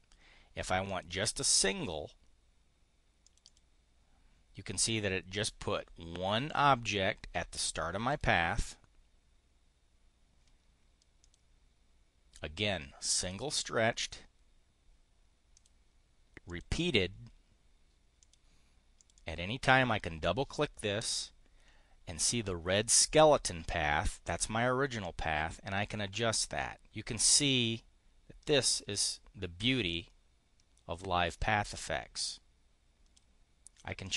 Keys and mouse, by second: 0.8 click, 3.2 click, 6.2 click, 8.1 click, 11.1 click, 13.1 click, 15.5 click, 16.4 click, 18.1 click, 18.8 click, 24.8-28.5 drag, 29.8-31.4 drag, 32.0-33.2 drag, 34.0-34.1 drag.